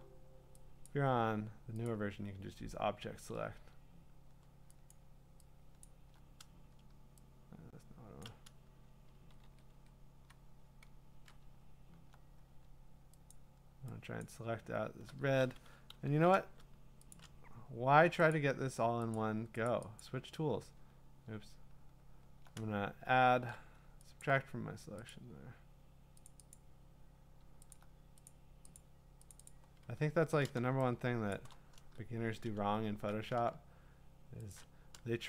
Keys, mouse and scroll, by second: 0.9 shift+click, 1.9 shift+click, 4.9 shift+click, 5.9 shift+click, 8.2 shift+click, 9.1 ctrl+z, 9.4 ctrl+z, 9.7 ctrl+z, 13.3 alt+click, 14.2 alt+click, 17.1 shift+click, 18.1 shift+click, 18.3 click, 19.2 click, 19.7 click, 20.0 click, 20.3 shift+click, 24.2 alt+click, 24.3 alt+click, 25.1 click, 26.3 click, 26.5 click, 26.8 alt+click, 27.7 alt+click, 28.1 alt+click, 28.3 click, 28.8 click, 29.3 click, 29.5 click, 29.6 alt+click, 30.1-30.4 scroll, 31.3 middle click, 31.3 click, 32.7 middle click, 32.8 middle click, 32.9 middle click, 34.5 shift+click, 34.7 scroll.